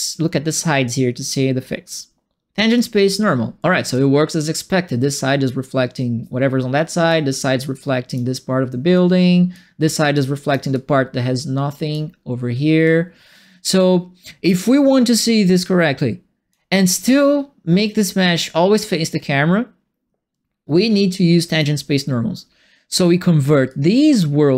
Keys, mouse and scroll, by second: 2.7 click, 3.9-7.0 drag, 7.7 click, 8.9 click, 10.1 click, 10.7-11.9 drag, 12.8-14.4 drag, 15.1-16.5 drag, 20.9 click, 23.6-24.5 drag.